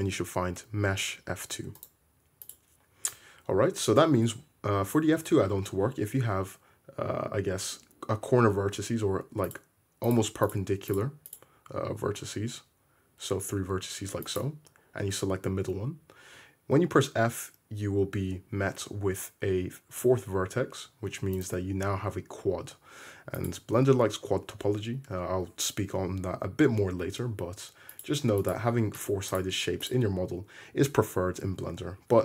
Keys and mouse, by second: 2.5 right click, 9.5 right click, 10.1 right click, 10.5-10.9 drag, 11.0-11.3 drag, 11.4-14.3 drag, 14.4-21.5 drag, 16.8 f, 21.5-23.4 middle drag, 23.4 click, 27.9 click, 28.4 click, 29.0 click, 29.9-32.2 middle drag, 32.0 `.